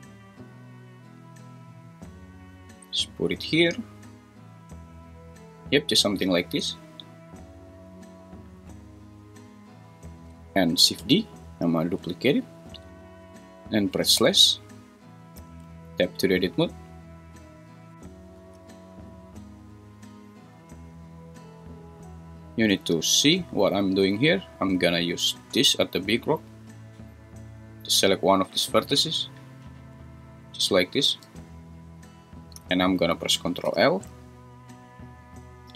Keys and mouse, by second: 2.2 click, 11.4 shift+d, 12.3 Escape, 14.2 /, 15.7 Tab, 17.4 click, 25.4 click, 30.2-31.5 drag, 34.9 ctrl+l.